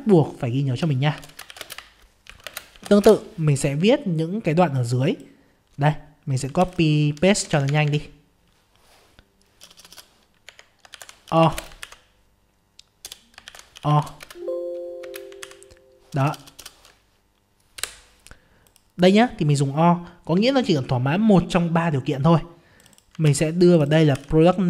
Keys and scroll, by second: 6.6 ctrl+c, 11.9 ctrl+v, 14.2 ctrl+space, 15.4 ctrl+v, 23.2 ctrl+c, 24.2 ctrl+v.